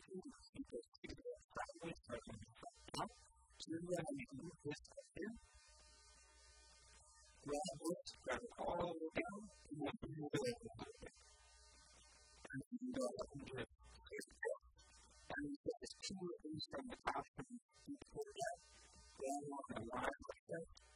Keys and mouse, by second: 3.5 g, 5.8 click, 6.4-9.4 drag, 6.4 a, 6.5 b, 10.0-11.9 drag, 13.1 a, 13.8 l, 14.3-16.2 middle drag, 17.0 shift+d, 19.0 g.